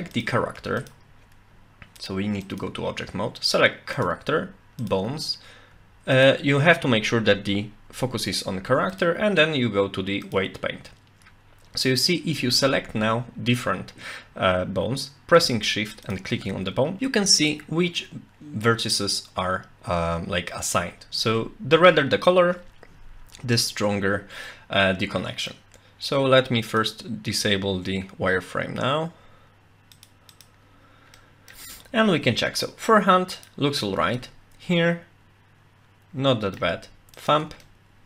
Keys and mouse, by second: 0.6 Tab, 0.8 click, 2.1-2.6 drag, 4.8 shift+click, 8.9-10.4 drag, 24.5-25.5 middle drag, 26.7-30.7 drag, 31.2 middle click, 33.3 shift+click, 34.2-36.6 middle drag, 37.1 shift+click, 37.6 middle click.